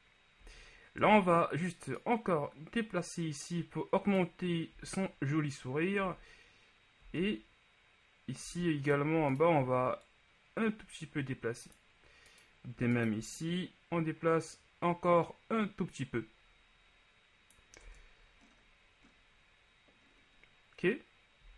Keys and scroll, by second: 1.1 Tab, 4.9 z, 9.3 shift+z, 18.0 Tab.